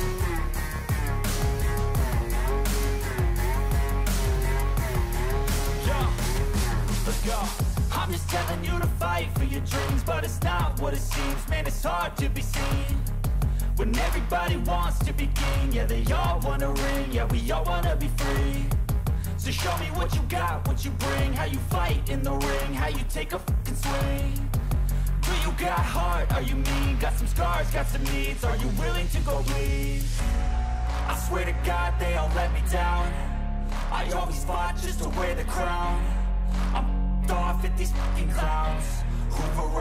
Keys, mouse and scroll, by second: 1.4 click.